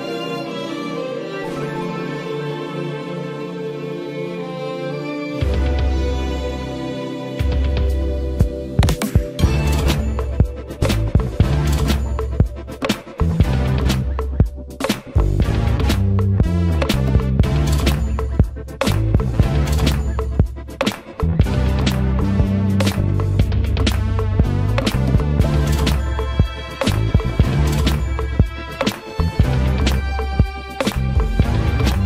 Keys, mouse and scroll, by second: 9.1 2, 18.1 8, 21.0 4.